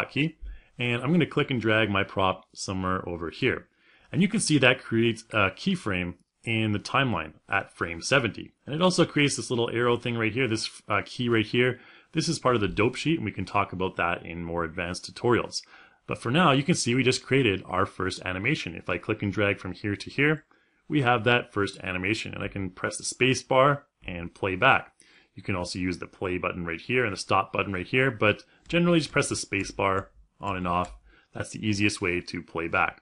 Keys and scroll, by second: 1.6 w, 22.0 space, 28.2 space.